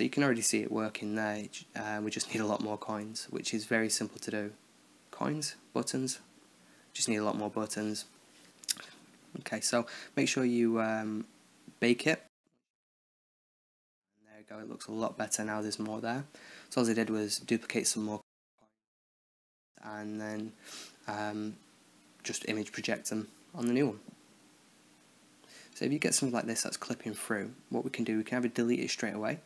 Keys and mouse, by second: 9.4-13.0 drag, 13.3 KP_0, 14.4-15.4 drag, 24.0-25.5 right drag, 25.5 Left, 25.6 Left, 25.9 Right, 26.1 Right, 26.3 Right, 26.6 Right, 26.8 Right, 27.5 Left, 27.8 Left, 28.1 Left.